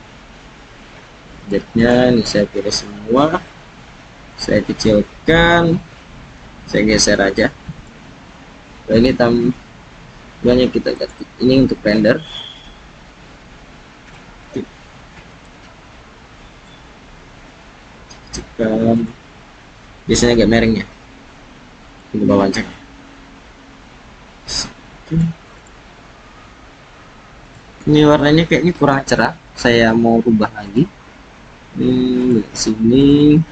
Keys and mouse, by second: 1.4 shift+click, 1.8 shift+click, 3.2 s, 6.4 g, 7.7-9.4 drag, 14.2 g, 17.6 s, 18.9 click, 20.8 r, 24.3 s, 27.4 click, 30.7 click, 32.2 click, 33.0 click.